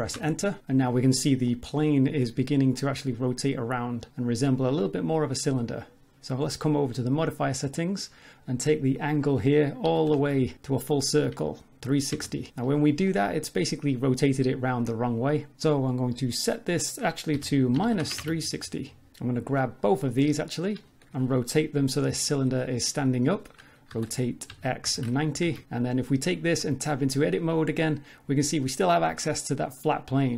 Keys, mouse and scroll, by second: 1.1 click, 1.5 middle click, 6.9 click, 9.0 click, 13.1 middle click, 16.5 click, 19.4 click, 20.0 scroll down 3, 20.1 middle click, 23.9 r, 26.6 Tab, 26.6 click, 27.3 middle click, 28.3-28.8 scroll up 4, 29.1 middle click, 29.5 scroll down 2, 29.7 middle click.